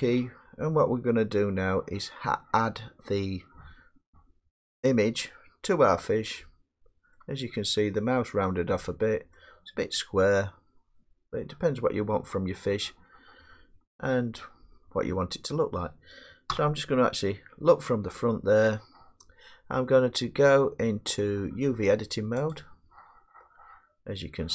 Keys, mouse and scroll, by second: 5.6 middle click, 6.0 middle click, 6.0 middle click, 7.1 middle click, 7.3 middle click, 7.4 middle click, 9.3 middle click, 10.3 scroll down 2, 12.4-13.4 middle drag, 13.8 scroll, 14.7 scroll, 16.5 1, 22.5 click.